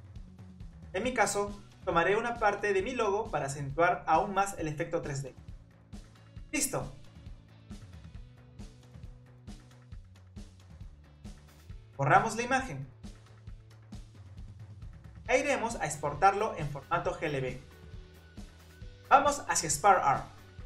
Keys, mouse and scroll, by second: 0.9-1.9 drag, 2.1 click, 2.7 click, 3.0 click, 3.7-4.9 middle drag, 4.9 e, 5.4 Tab, 5.7 e, 6.7 middle click, 7.5 Tab, 7.7 middle drag, 7.9 Tab, 8.0 click, 8.1 scroll up 1, 8.1 middle click, 8.7 click, 9.0 middle click, 9.8 scroll down 1, 9.9 middle click, 10.7 click, 11.4 click, 11.4 scroll up 1, 11.5 Tab, 11.6-12.0 middle drag, 12.0 click, 12.0 Tab, 12.7 click, 12.9 Delete, 14.0 click, 14.3 Tab, 14.4 click, 14.8 click, 14.9-15.4 middle drag, 15.4 click, 15.4-15.9 middle drag, 16.7-17.2 drag.